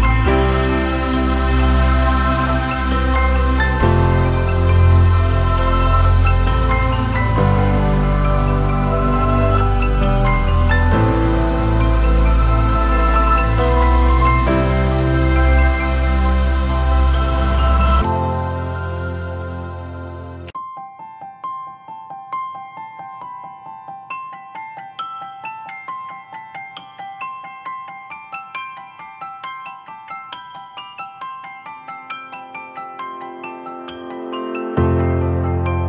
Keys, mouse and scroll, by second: 1.9 right click, 5.9 double click, 33.4 alt+click.